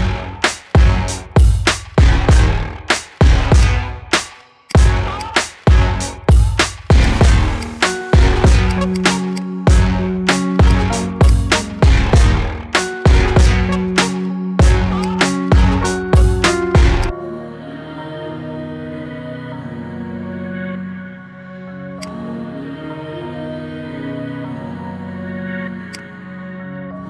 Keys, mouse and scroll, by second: 3.7 click, 4.8 shift+click, 5.3-7.2 right drag, 7.7-9.0 right drag, 9.0 click, 9.5 click, 10.1 g, 11.2-12.0 scroll down 5, 11.3 click, 12.1-13.1 middle drag, 13.1-13.5 scroll up 3, 13.5 click, 14.3 s, 15.3-15.7 scroll up 4, 15.7-16.1 shift+middle drag, 16.1-16.7 scroll up 2, 16.7 s, 17.7 KP_1, 18.1-18.5 scroll down 3, 18.5-19.1 shift+middle drag, 19.1 g, 22.7 KP_3, 23.7 g, 26.3-27.0 middle drag.